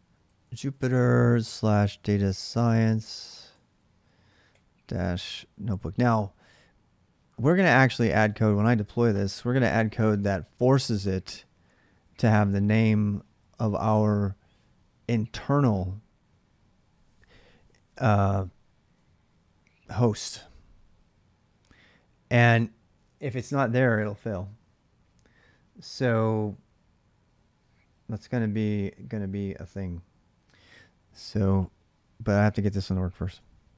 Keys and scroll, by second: 0.0-4.2 typing, 32.0-33.7 typing.